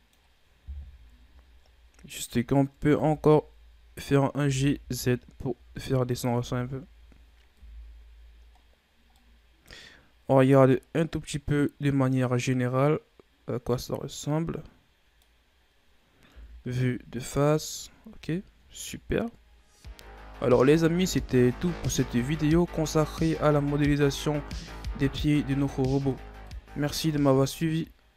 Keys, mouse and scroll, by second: 1.5-2.8 scroll up 7, 2.8 Tab, 4.3 g, 6.1 Tab, 6.6-7.4 scroll down 6, 7.4 KP_1, 8.5-9.0 scroll down 4, 9.0-9.7 middle drag, 9.7-10.2 scroll up 5, 10.2-10.5 scroll down 2, 10.5-11.0 scroll up 3, 11.0-14.0 middle drag, 15.4-16.2 scroll down 1, 16.2 KP_1, 17.2-18.1 scroll down 3, 18.1-18.9 shift+scroll up 5, 18.9-19.6 ctrl+scroll down 2, 19.6-20.7 scroll up 2, 21.1 scroll up 2, 22.5-23.1 scroll down 1, 23.1-26.3 scroll up 2.